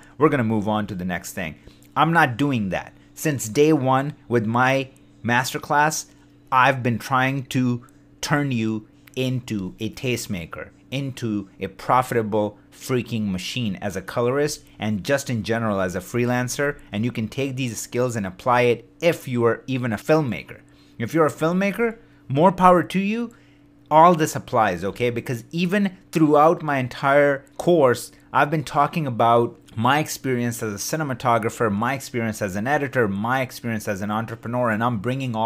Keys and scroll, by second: 16.3 shift+d.